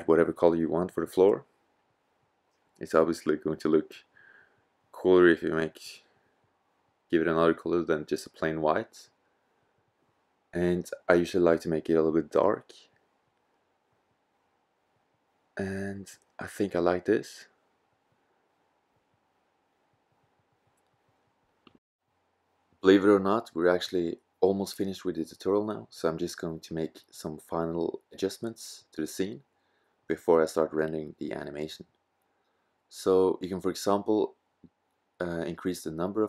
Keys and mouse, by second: 1.1 middle click, 6.0 middle click, 20.2-21.3 drag, 21.4 click, 21.9 click, 24.3-24.9 drag, 25.4 click, 25.8-26.4 drag.